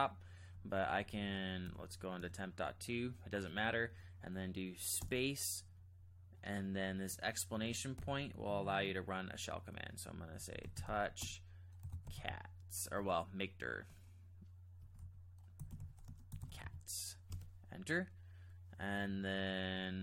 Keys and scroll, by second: 0.5-1.6 typing, 2.2 Return, 5.0 Return, 5.0 typing, 8.0 !, 10.1-17.1 typing, 17.3 Return.